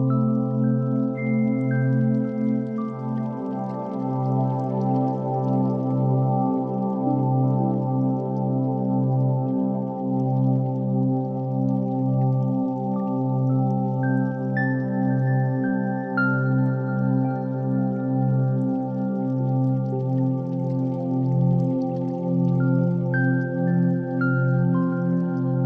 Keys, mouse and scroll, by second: 0.0 o, 3.3 shift+a, 9.2-13.5 drag, 15.1-24.2 drag, 24.5-25.6 drag.